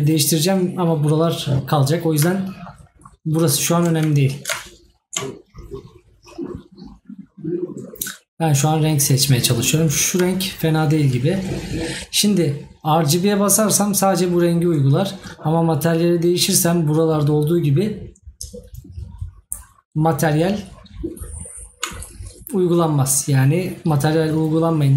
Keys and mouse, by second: 2.4 right click.